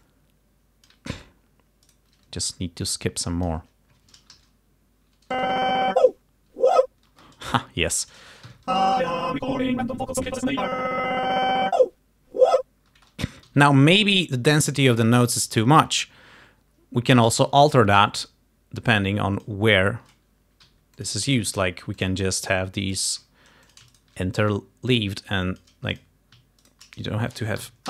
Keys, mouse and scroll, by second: 0.1-1.1 alt+drag, 1.9 shift+right click, 2.9 click, 4.4 shift+Left, 5.4 shift+Right, 7.2 space, 8.6 shift+Home, 8.8 shift+space, 13.0 space, 13.5 g, 14.7 click, 17.6 t, 18.0-19.7 drag, 20.7 g, 21.1 click, 21.7 s, 22.1 click, 23.0 click, 23.3 s, 23.8 shift+click, 24.0 shift+right click, 24.5-25.9 shift+drag, 26.0 click, 26.7 shift+right click, 27.7 Home.